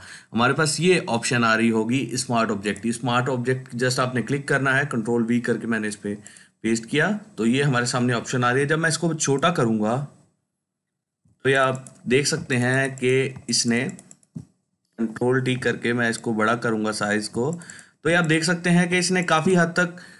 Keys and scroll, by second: 12.2 ctrl+space, 12.8 ctrl+space, 14.8 ctrl+t, 17.9 ctrl+space, 18.4 ctrl+space.